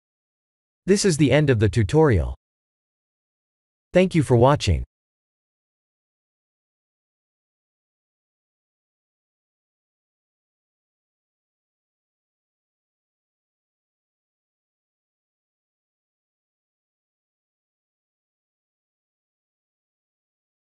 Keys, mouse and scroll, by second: 0.3 click, 5.2 ctrl+space, 5.8 n.